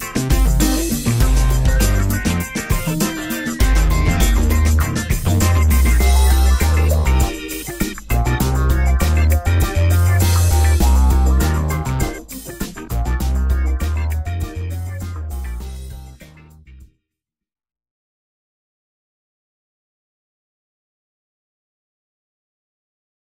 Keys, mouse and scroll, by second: 6.9-9.3 middle drag, 11.7-15.3 shift+middle drag, 16.3-17.0 shift+middle drag, 17.2-19.5 middle drag, 20.8-21.6 middle drag, 21.7-23.3 shift+middle drag.